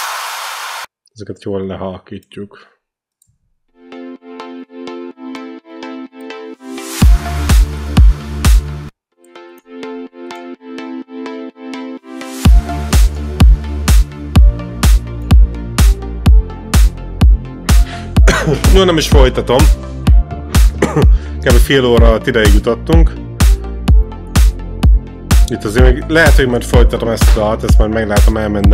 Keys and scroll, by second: 3.5 space, 8.7 space.